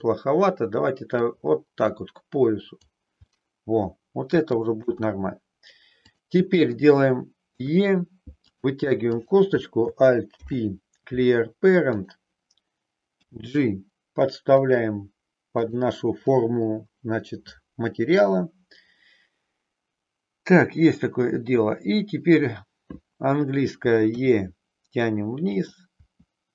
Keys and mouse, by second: 1.1-2.8 drag, 3.2-4.7 middle drag, 4.8 KP_3, 6.1 click, 7.6 e, 8.4 click, 9.2 click, 10.3 alt+p, 13.2 g, 14.6 click, 15.6 click, 24.1 e, 25.6 click, 26.0 e.